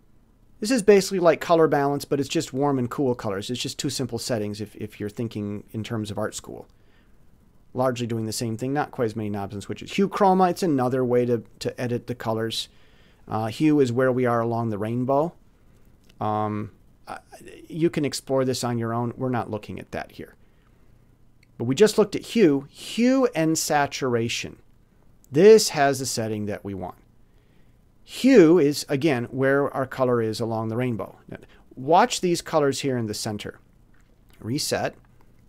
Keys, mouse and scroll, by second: 1.2 middle click, 4.7-6.1 middle drag, 6.7 click, 8.4 click, 9.9 click, 11.9 click, 13.5 click, 14.5 click, 16.0 click, 18.4 click, 21.7 click, 24.8 click, 26.5-27.5 drag, 28.9-30.0 drag, 31.0 click, 34.1 click.